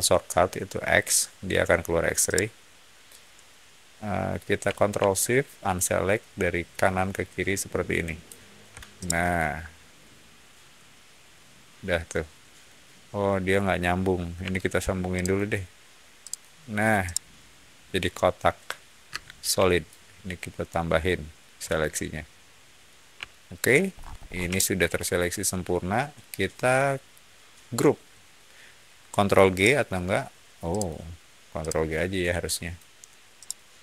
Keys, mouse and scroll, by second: 2.2-4.2 middle drag, 6.7-8.1 ctrl+shift+drag, 8.9-12.5 ctrl+shift+middle drag, 14.3 l, 15.1 click, 16.1 click, 16.9-18.9 middle drag, 19.0 space, 19.7-20.9 ctrl+drag, 21.5-22.7 ctrl+middle drag, 23.2-23.8 shift+middle drag, 23.9 scroll up 1, 24.1 scroll down 1, 24.4 shift+middle click, 29.4 shift+right click, 30.6 shift+click, 31.5-32.6 shift+drag, 33.3 shift+right click.